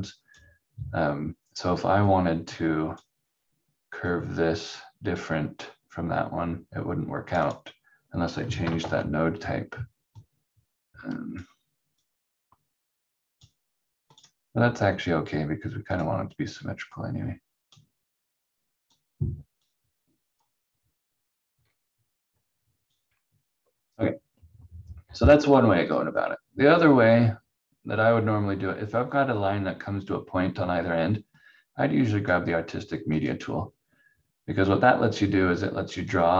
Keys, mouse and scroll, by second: 8.8 ctrl+z, 10.2 click, 21.6 c, 22.9 q, 31.4 click.